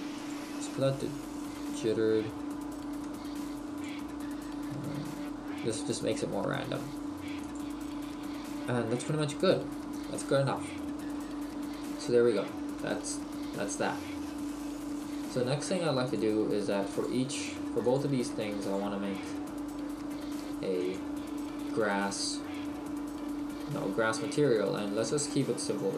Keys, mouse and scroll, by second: 0.3 click, 3.2 click, 11.2 middle click, 16.2 click, 17.1 click.